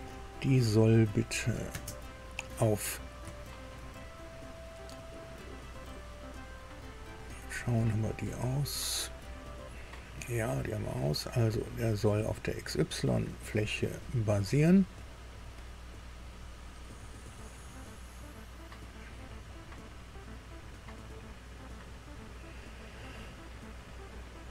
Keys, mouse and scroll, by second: 1.2 click, 1.7 space, 3.3 shift+middle click, 4.0-4.5 shift+scroll up 3, 6.9-7.2 scroll up 2, 7.4-7.8 scroll up 2, 9.7-10.2 scroll down 2, 10.2-10.6 scroll down 2, 13.5 click, 18.4 click, 21.2 click, 23.7 scroll down 1.